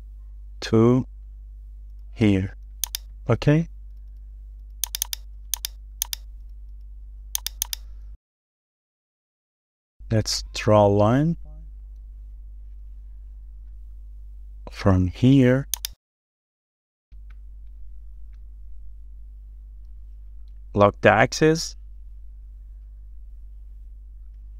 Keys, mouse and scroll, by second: 0.4 shift+scroll down 1, 0.8-1.2 scroll up 1, 3.2 middle click, 3.3-3.9 scroll down 1, 3.9-4.3 scroll down 1, 5.1 double click, 6.4 scroll down 1, 6.7 shift+middle click, 6.9 shift+scroll down 1, 7.7 double click, 8.1-8.8 scroll up 2, 8.5 middle click, 9.2-10.4 scroll up 2, 10.4-10.8 scroll up 1, 10.8 middle click, 11.8 scroll up 1, 12.1 shift+middle click, 15.0 i, 20.8 middle click.